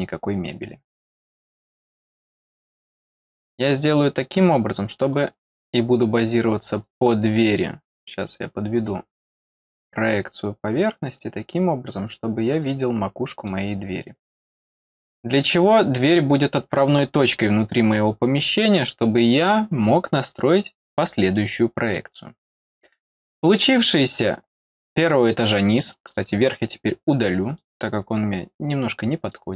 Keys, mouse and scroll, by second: 1.8 click, 5.1-5.5 scroll up 2, 5.9-6.4 scroll up 1, 6.7-7.5 scroll down 1, 8.3-9.5 drag, 11.2 scroll down 1, 12.6 click, 15.3 click, 18.2 middle click, 18.2 scroll up 2, 18.4 middle click, 20.2-21.1 scroll down 2, 21.3 middle click, 22.2 scroll down 1, 25.7 click, 26.0-27.4 right drag, 27.4 click, 29.2-29.5 right drag.